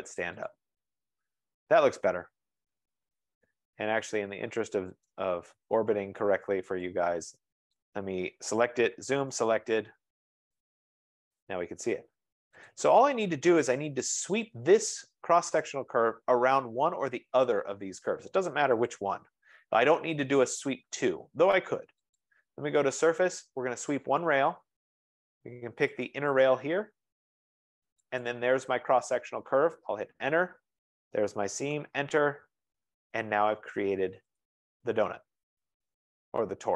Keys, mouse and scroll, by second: 0.6 click, 5.2 right click, 6.2 scroll, 7.9 click, 8.8-9.8 typing, 10.0 Return, 11.6 right click, 11.6 z, 11.9 scroll, 12.8 click, 14.5 click, 15.8 click, 19.0 click, 22.3 click, 24.2 click, 26.2 click, 28.5 click, 28.7 click, 30.0 Return, 31.9 Return, 32.0-33.4 drag, 34.5 click.